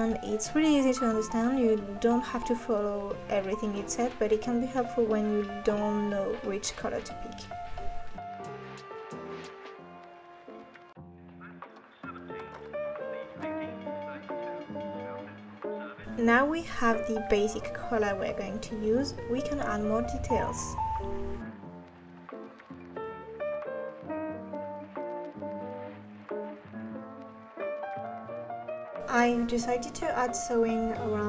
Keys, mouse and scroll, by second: 28.5 r, 28.8 click, 29.5 Tab, 29.8 click, 30.0 s, 30.3 r, 30.6 g, 30.8 click.